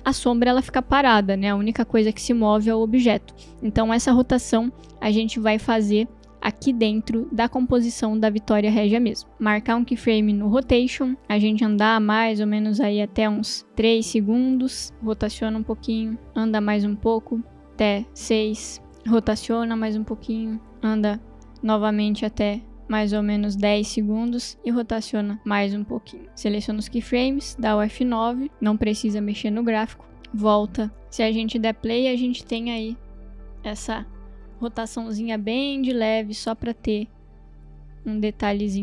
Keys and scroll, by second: 0.0 ctrl+z, 0.8 ctrl+z, 27.6 F9, 31.0 space.